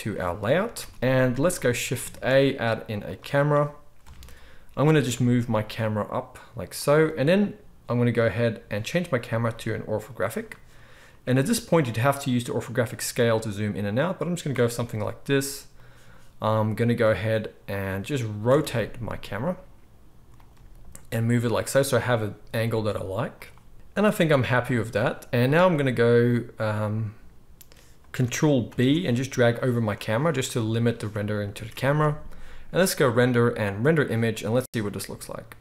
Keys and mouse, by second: 0.0 ctrl+s, 0.0-9.2 middle drag, 0.6 ctrl+s, 0.8 ctrl+s, 2.1 shift+a, 4.0 KP_0, 4.8 g, 9.2 click, 9.3 middle click, 9.6-15.8 drag, 15.2 g, 15.8-17.0 middle drag, 17.0-20.4 drag, 18.4 r, 20.4-23.7 middle drag, 20.5 g, 22.2 g, 23.7 alt+a, 23.7 ctrl+s, 23.7-28.2 right drag, 28.2-35.6 ctrl+drag, 28.6 ctrl+b, 31.5 ctrl+s, 31.7 ctrl+s, 31.8 ctrl+s, 32.9-35.6 middle drag, 32.9-35.6 right drag.